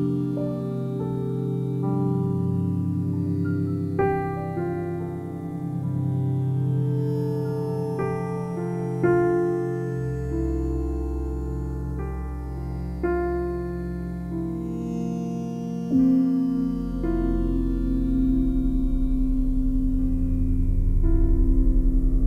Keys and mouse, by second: 1.0 alt+shift+click, 3.7 typing, 4.8 click, 5.4 typing, 6.8 click, 7.9 typing, 9.3 click, 10.0 typing, 11.1 click, 11.6-15.2 ctrl+alt+drag, 12.2 typing, 15.9 click, 15.9 typing, 16.9 click, 17.6 click, 18.6-20.7 typing, 19.4 Escape.